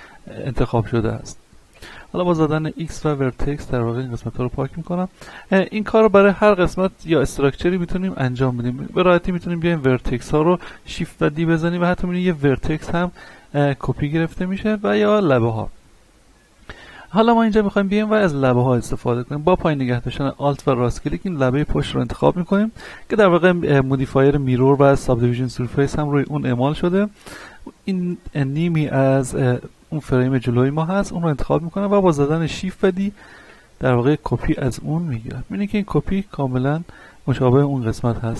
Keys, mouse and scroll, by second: 1.7 x, 3.0 click, 3.5-5.4 middle drag, 5.4 ctrl+Tab, 5.9 click, 6.5 right click, 7.5 middle click, 8.1-10.9 shift+middle drag, 10.9 shift+d, 11.2 right click, 11.8-14.2 drag, 14.2 x, 14.7 click, 15.4 right click, 20.6 alt+right click, 23.0-24.8 scroll down 1, 26.4 middle click, 29.3-31.6 shift+middle drag, 32.1 shift+middle click, 33.4 shift+d, 33.7 right click, 34.8 click, 36.0 scroll down 1, 36.2-38.3 middle drag.